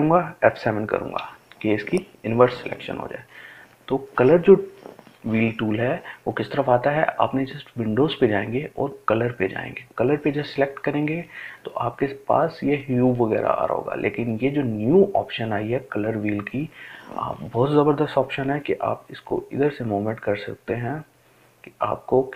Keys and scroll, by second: 0.9 shift+F7, 3.0 shift+F8.